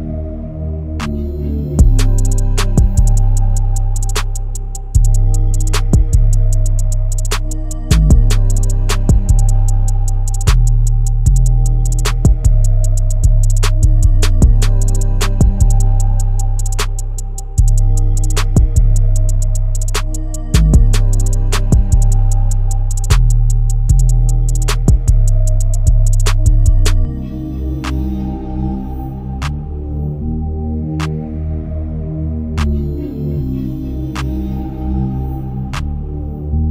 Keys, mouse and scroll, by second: 9.1 click, 14.3-14.9 alt+scroll up 1, 15.9-16.8 scroll down 1, 16.8-17.3 scroll up 1, 17.3-19.2 drag, 20.1-20.6 scroll down 1, 20.6 click, 20.7-21.3 click, 22.3 ctrl+r, 23.7-27.7 drag, 28.9-33.7 alt+drag, 35.9-36.7 scroll up 1.